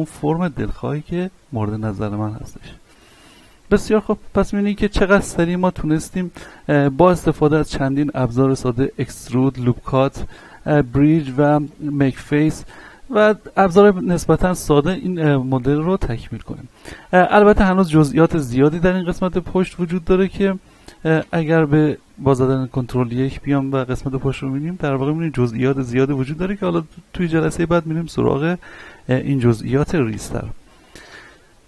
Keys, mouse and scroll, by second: 3.2-7.1 middle drag, 7.1-13.9 middle drag, 13.9 middle click, 15.3 scroll up 1, 15.3 middle click, 16.0 scroll up 1, 18.6 scroll down 1, 21.9-22.7 scroll up 1, 22.7 z, 23.2-23.5 scroll down 1, 24.6 shift+middle click, 26.8-27.2 scroll down 1, 28.4-30.7 middle drag, 30.7 z, 31.2 shift+middle click.